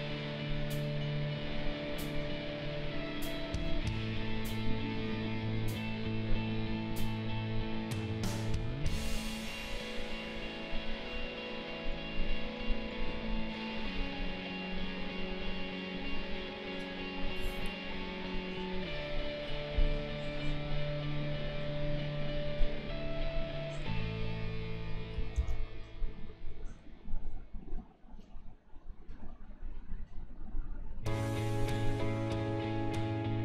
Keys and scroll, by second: 25.4 ctrl+z.